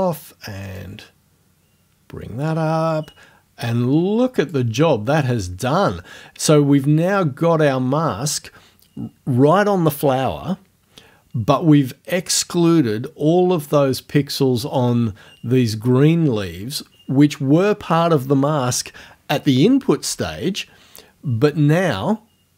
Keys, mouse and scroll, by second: 0.8-4.7 drag.